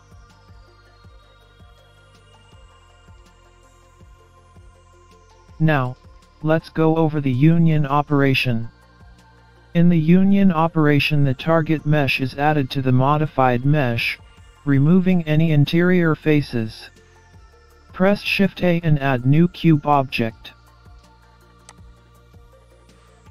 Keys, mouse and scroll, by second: 3.3-3.7 scroll down 3, 3.7-4.7 scroll up 3, 4.1 middle click, 20.4 shift+a.